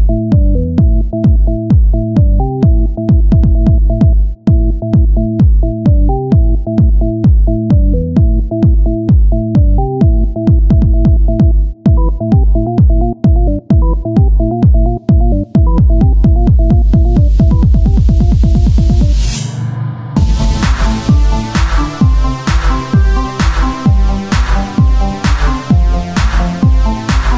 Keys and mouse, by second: 1.2-2.6 drag, 2.6 r, 6.7-8.9 drag, 6.7 s, 9.0 Tab, 9.7 z, 11.8-13.0 drag, 18.2 KP_3, 19.2 Tab, 22.5 KP_Divide, 23.8 Tab, 26.1 click, 26.7-27.3 right drag.